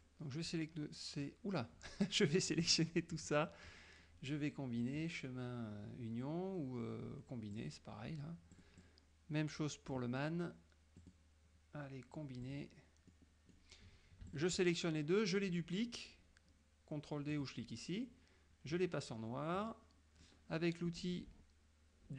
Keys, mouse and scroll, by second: 0.1-2.8 drag, 5.0 click, 7.6 click, 8.6-10.1 drag, 11.1 click, 12.5 click, 13.2 middle click, 14.4 shift+click, 17.4 click, 19.7 click.